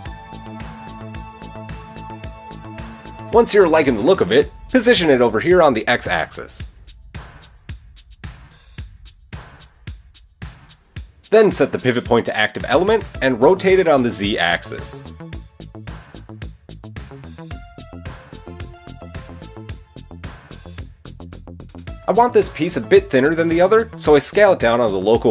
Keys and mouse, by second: 0.2 Tab, 1.5-2.2 middle drag, 2.2 click, 2.4 middle click, 3.0 KP_7, 3.1 click, 3.2-7.6 middle drag, 4.5 g, 8.6-9.1 shift+middle drag, 11.4-20.7 drag, 13.6 r, 15.9 r, 18.1 r, 20.8-23.6 middle drag, 23.1 s.